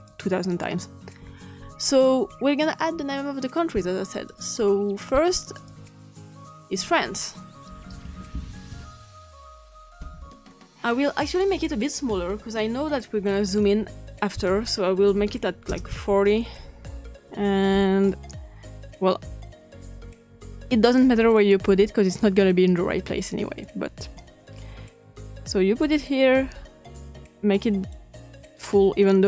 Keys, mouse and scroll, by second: 0.0 click, 4.0 click, 4.7 click, 5.5 click, 6.5-7.6 drag, 7.6-9.1 typing, 11.2 click, 12.5 click, 15.1 typing, 15.6 Return, 17.1 click, 18.0-20.1 drag, 21.3 click, 23.6-25.9 drag, 26.9-27.9 drag.